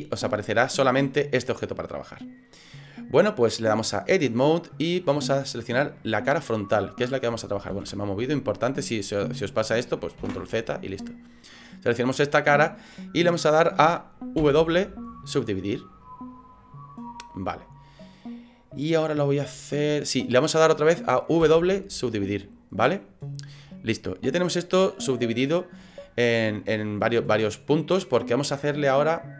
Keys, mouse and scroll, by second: 3.8 click, 6.8 right click, 7.7 ctrl+z, 8.8 right click, 10.2 ctrl+z, 11.4 middle click, 14.4 w, 21.5 w, 24.3 middle click, 27.2 middle click.